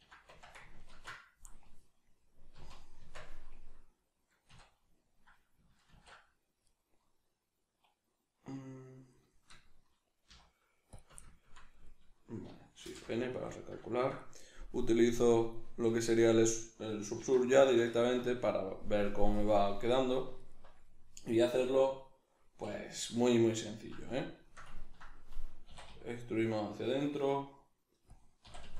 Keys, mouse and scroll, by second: 0.2 Tab, 0.8 ctrl+2, 2.5 z, 3.0 Tab, 4.5 a, 5.9 ctrl+a, 6.8 right click, 9.3-15.2 shift+middle drag, 10.3 z, 12.8 shift+n, 15.2 click, 15.9-28.4 middle drag, 17.2 alt+q, 20.4 alt+right click, 22.6 \, 25.7 e, 28.2 click, 28.4 e.